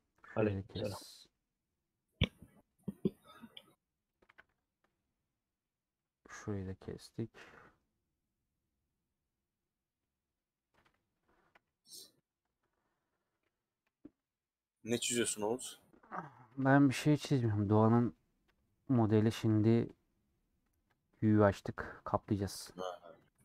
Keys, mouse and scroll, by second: 0.9 middle click, 1.8 scroll down 1, 2.2-2.7 scroll up 2, 3.6 click, 4.3 a, 5.9-7.9 middle drag, 7.9-8.3 scroll down 2, 8.3-11.5 middle drag, 11.5 /, 12.0 Tab, 12.3 click, 13.8 /, 13.9 middle click, 14.9 Tab, 15.3 3, 16.3 ctrl+KP_Add, 16.6 ctrl+KP_Add, 17.4-18.5 middle drag, 18.5 ;, 18.9 middle click, 19.3 2.